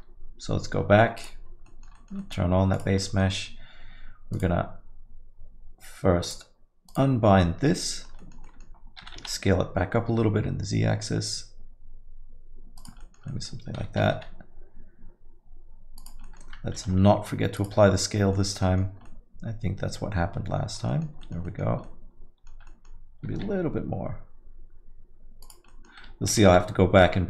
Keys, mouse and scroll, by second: 1.4 click, 1.7 middle click, 1.9 alt+middle click, 2.2 middle click, 2.7 click, 3.1 middle click, 4.3 click, 6.2 click, 7.7 click, 7.7 middle click, 7.8 middle click, 8.2 alt+middle click, 8.4 alt+middle click, 8.4 middle click, 9.0 s, 13.0 alt+middle click, 13.3 middle click, 14.0 g, 16.2 middle click, 16.7 ctrl+a, 18.3 alt+middle click, 18.6 middle click, 18.9 scroll down 1, 19.0 alt+middle click, 20.9 middle click, 21.2 alt+middle click, 21.4 middle click, 21.8 alt+middle click, 22.6 middle click, 23.2 s, 25.7 middle click, 26.3 g.